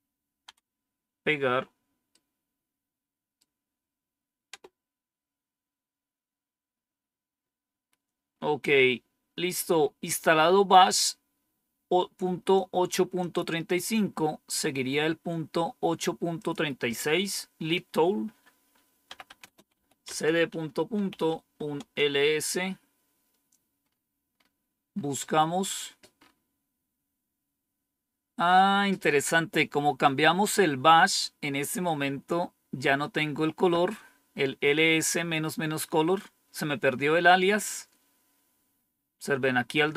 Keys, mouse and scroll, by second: 0.4 Down, 2.0 right click, 4.4 Return, 8.2 scroll down 1, 9.0-9.7 scroll down 1, 9.7-10.6 scroll up 1, 13.1 click, 13.8 click, 16.3 click, 18.8-21.7 typing, 23.7-25.0 scroll up 3, 25.4-26.2 scroll up 2, 28.9 scroll down 1, 29.5 scroll down 1, 31.7 scroll down 1.